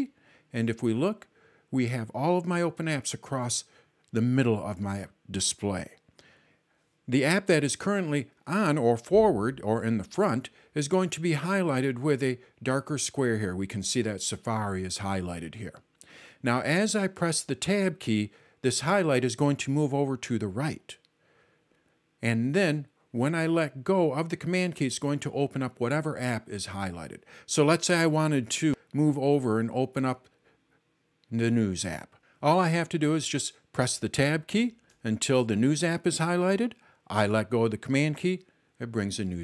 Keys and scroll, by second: 34.2 super+Tab, 34.5 super+Tab, 34.9 super+Tab, 35.2 super+Tab.